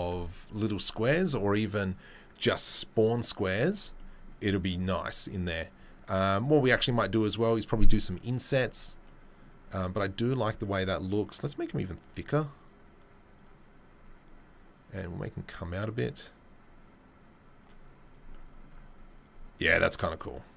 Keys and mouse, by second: 9.9 click, 10.0-12.1 middle drag, 12.1-18.1 drag, 18.1-19.1 middle drag, 19.1 click, 19.2-20.5 middle drag.